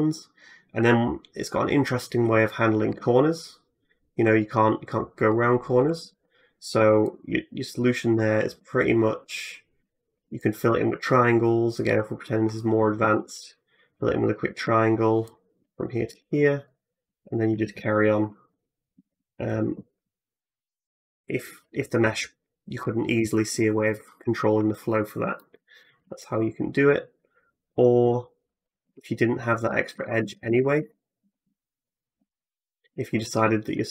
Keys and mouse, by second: 2.7-5.2 middle drag, 5.2 ctrl+f, 5.8 ctrl+z, 6.6 1, 6.9 middle click, 8.6 shift+middle click, 10.2 shift+middle click, 11.7 f, 12.9 2, 13.3 middle click, 15.1 shift+middle click, 15.9 f, 16.5 middle click, 17.3-18.9 typing, 22.0-25.4 drag, 25.4 middle click, 25.8 shift+click, 26.2 middle click, 26.7 shift+click, 26.9 middle click, 27.3-29.3 drag, 28.8 ctrl+z, 29.3 ctrl+z, 29.8 ctrl+z, 30.0 ctrl+z, 30.3 ctrl+z, 30.6 ctrl+z, 31.0 ctrl+z, 31.3 ctrl+z, 32.7 ctrl+z.